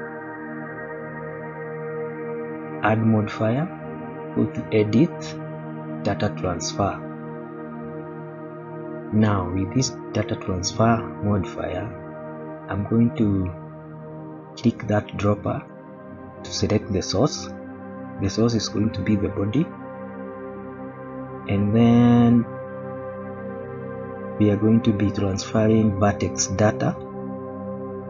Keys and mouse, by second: 0.9 middle click, 2.7-7.5 drag, 9.4 middle click, 26.9 click, 27.9 click.